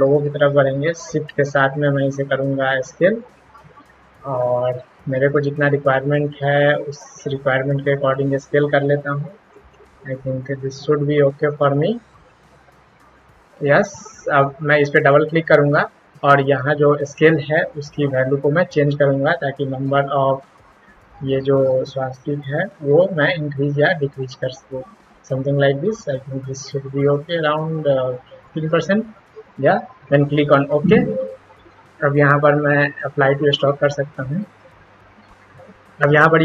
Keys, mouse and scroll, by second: 1.4-3.2 shift+drag, 4.5-6.0 shift+drag, 7.8-9.5 shift+drag, 12.1 shift+click, 12.8 click, 14.8 click, 15.0 double click, 18.0-19.8 drag, 21.5 click, 23.8 click, 25.6 click, 26.8 click, 30.3 click, 33.3 click, 34.3 click.